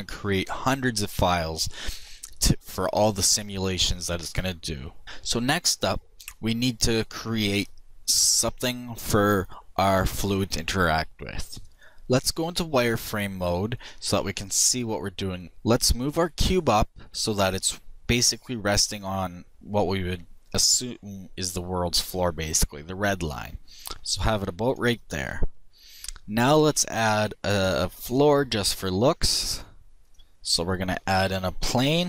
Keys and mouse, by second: 12.2 middle click, 13.1-15.0 drag, 18.0-19.8 drag, 18.3 KP_1, 20.4-22.3 drag, 26.0 shift+s, 31.6 KP_7.